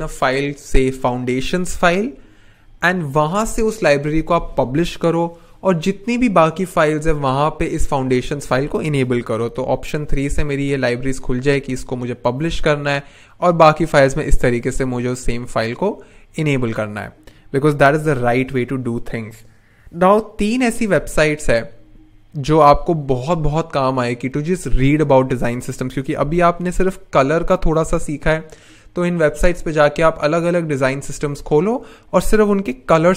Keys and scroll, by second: 9.4 alt+3, 18.1 n.